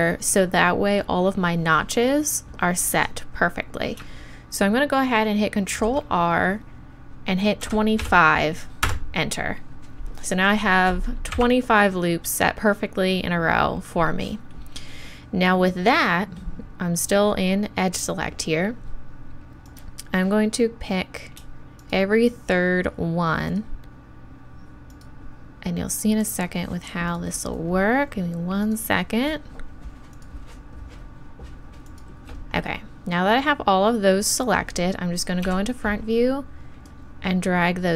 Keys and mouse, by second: 5.7 ctrl+r, 15.3-19.7 middle drag, 19.7-21.5 right drag, 21.8-33.7 right drag, 33.7-34.9 middle drag, 35.4 KP_1.